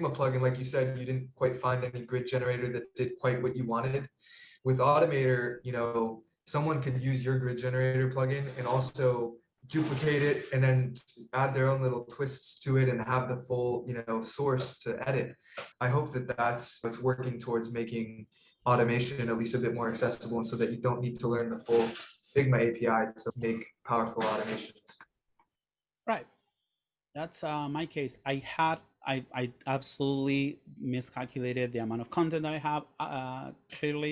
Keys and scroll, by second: 28.9 Right.